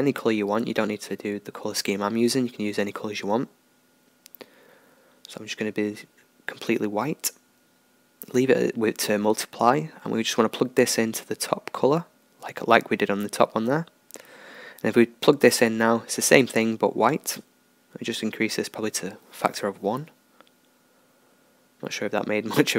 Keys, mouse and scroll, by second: 14.2-22.7 drag.